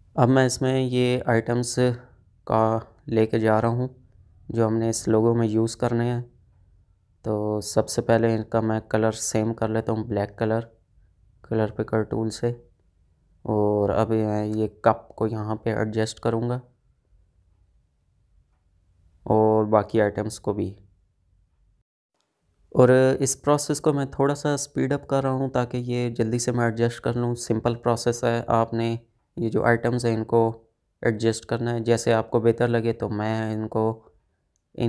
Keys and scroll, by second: 8.1 ctrl+z, 15.9 space, 18.3 Up, 18.7 Right, 23.0 space, 23.7 space, 25.6 space, 30.6 space.